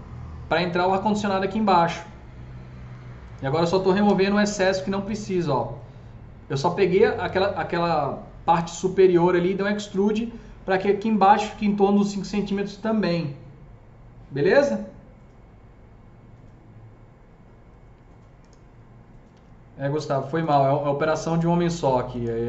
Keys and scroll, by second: 4.1 Delete, 19.2 Delete, 21.1 Delete, 21.7 Delete, 22.1 Delete.